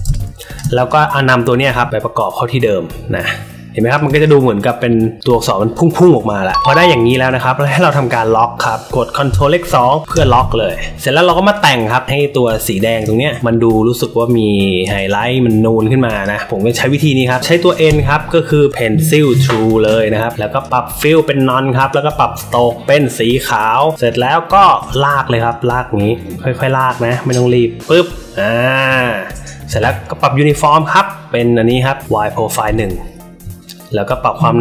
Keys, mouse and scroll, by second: 0.0 space, 0.1 click, 0.8 drag, 1.6-3.9 shift+drag, 4.1 click, 6.5-7.1 drag, 6.5 space, 7.6 click, 11.5 click, 12.0 alt+middle click, 12.4 space, 12.5 click, 16.1 click, 16.7 alt+middle click, 17.8 n, 20.5 click, 21.0 click, 21.7 click, 23.5 click, 24.7 alt+middle click, 25.4-27.8 drag, 30.5 click, 32.6 click.